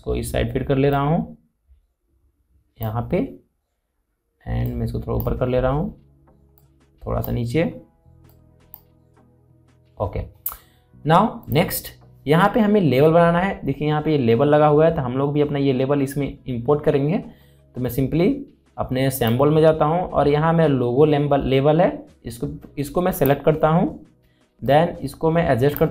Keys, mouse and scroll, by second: 12.1 click, 19.8 click, 19.8 click, 23.8 click, 23.8-25.9 drag.